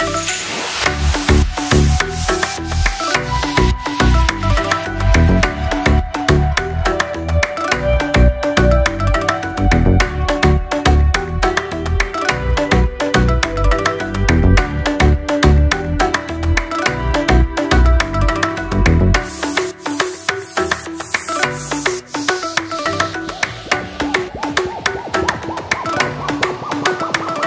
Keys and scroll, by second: 2.8 6, 9.1 ctrl+s.